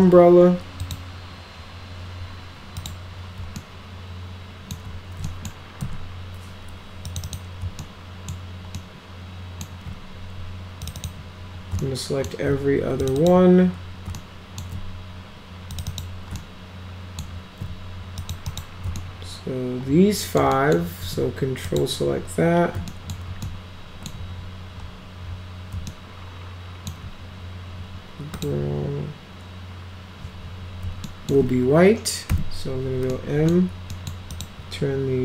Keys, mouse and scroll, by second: 0.8 click, 2.8 click, 3.6-4.7 alt+middle drag, 5.3 middle click, 5.8 F4, 7.1 click, 7.3 click, 7.8 alt+middle click, 8.8 alt+middle click, 10.9 ctrl+click, 10.9 ctrl+click, 11.8-12.3 alt+middle drag, 13.0 ctrl+click, 13.2 ctrl+click, 14.2 alt+middle click, 15.7 ctrl+click, 15.9 ctrl+click, 16.4-17.2 alt+middle drag, 18.2 ctrl+click, 18.5 ctrl+click, 19.0-20.4 alt+middle drag, 20.6 alt+middle click, 21.6 ctrl+click, 22.9 alt+middle drag, 23.5 alt+middle click, 25.9 alt+middle click, 28.3 click, 31.1 alt+middle click, 32.3 m, 33.1 middle click, 33.9 middle click, 34.3 click.